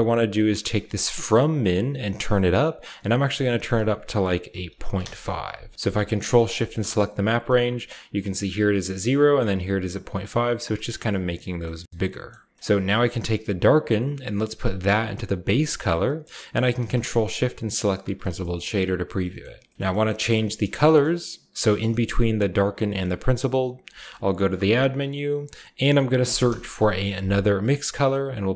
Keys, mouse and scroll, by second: 0.8-2.7 shift+drag, 2.9 shift+click, 4.3-5.3 typing, 6.3 ctrl+shift+click, 6.8 click, 7.9-12.1 shift+drag, 11.2-12.6 scroll down 1, 12.1-13.7 middle drag, 12.7-15.8 drag, 16.0 click, 16.5 ctrl+shift+click, 17.2-17.5 ctrl+shift+drag, 17.7 shift+click, 17.9-19.7 scroll down 1, 18.1 middle click, 18.5 typing, 20.2-21.3 typing, 21.6 click, 22.3 click, 23.6 shift+a, 24.2 shift+click, 26.0-26.5 typing, 27.6 click.